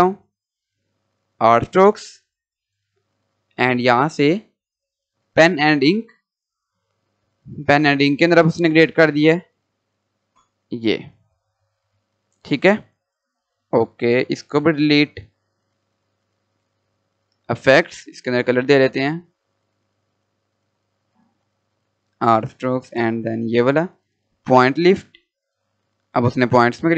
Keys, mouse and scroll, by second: 5.5 click, 8.4 click, 15.2 Delete, 16.2 click, 24.5-26.9 drag.